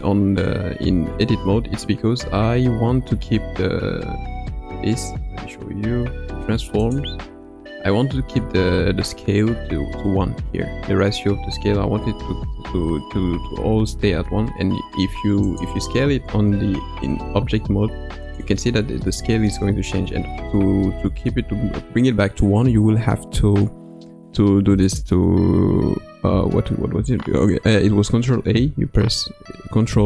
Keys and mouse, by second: 0.9 Tab, 2.2 Tab, 3.2 Tab, 3.6 Tab, 5.0 n, 6.8 click, 15.5 click, 16.1 s, 25.0 right click, 29.8 ctrl+a.